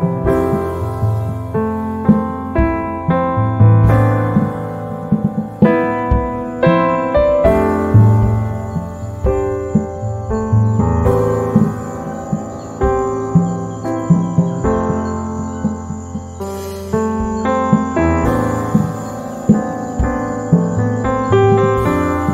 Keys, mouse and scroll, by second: 2.1 shift+click, 5.9 shift+click, 10.6 z, 10.7 right click, 12.5 h, 12.9-14.9 drag, 14.9 F6, 15.4-16.8 drag, 16.8 space, 17.3 shift+click, 20.0 z, 20.3-21.9 drag, 21.9 F7.